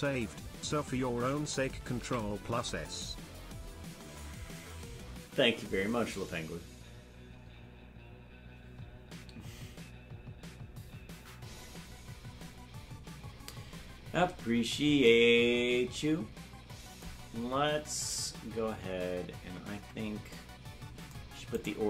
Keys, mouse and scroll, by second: 4.5 ctrl+s, 19.7 Tab, 21.5 right click.